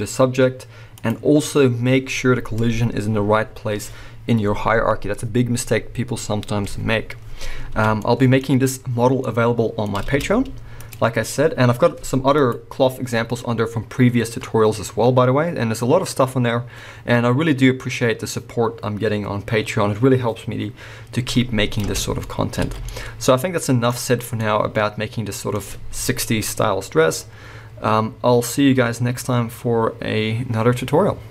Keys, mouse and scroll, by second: 1.0 click, 7.8 alt+a, 8.1-11.0 middle drag, 8.4-9.2 scroll down 2, 10.0 space, 11.0 click, 12.8 click, 22.1 space, 22.2-31.3 middle drag, 22.6 alt+a, 24.0-24.4 scroll down 2.